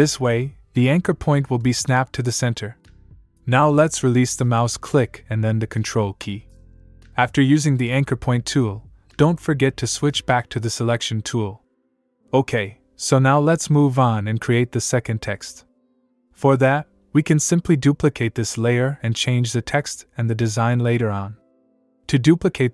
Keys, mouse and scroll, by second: 9.7 click, 18.6 click.